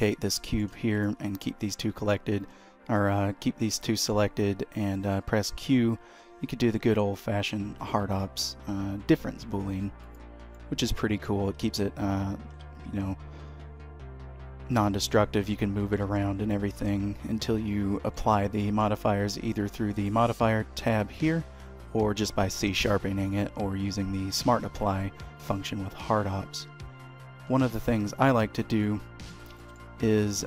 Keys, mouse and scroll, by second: 0.1 shift+middle click, 0.6 middle click, 1.0 shift+click, 4.9 q, 10.7 middle click, 12.6 h, 15.1 ctrl+z, 16.1 g, 18.3 middle click, 20.0 click, 26.8 h, 27.9 ctrl+z, 28.1 ctrl+z, 29.0 middle click, 29.7 shift+middle click, 30.1 click.